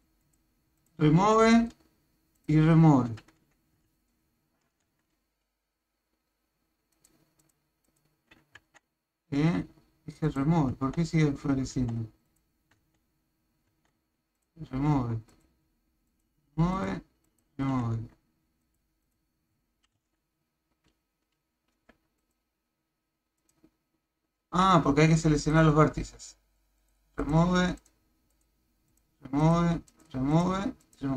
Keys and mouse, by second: 0.2 click, 0.8 click, 1.3 click, 2.4 click, 3.9 ctrl+Tab, 6.9 click, 7.4 click, 7.9 click, 8.6 Tab, 10.4 click, 10.7 Tab, 12.3 click, 13.7 Tab, 15.3 click, 16.8 click, 17.4 click, 17.7 Tab, 18.6 click, 19.0 click, 20.0 v, 21.8 b, 23.5 click, 24.4 a, 25.4 click, 26.9 click, 27.2 click, 27.8 click, 28.3 click, 28.9 click, 29.4 click, 30.3 click, 30.9 click.